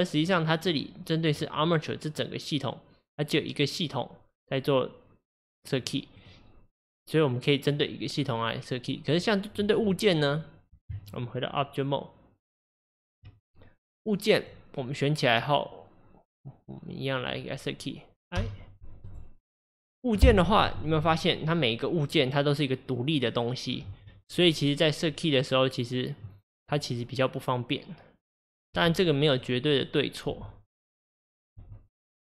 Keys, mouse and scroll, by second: 7.7 click, 9.8 click, 13.2 Tab, 14.5 click, 19.1 i, 21.0-26.8 drag, 28.7 r, 29.8 click, 30.3 r, 31.3 click, 31.6 r.